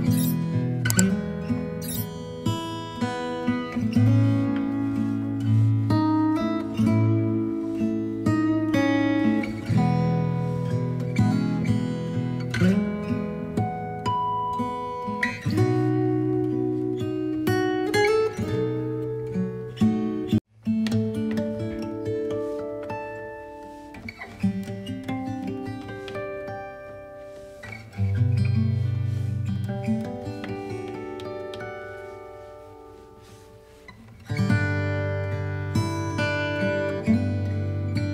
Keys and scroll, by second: 25.1 b.